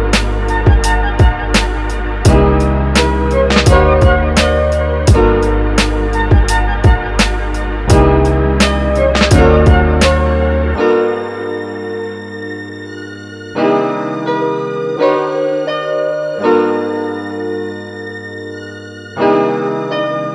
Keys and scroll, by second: 6.1 super+z.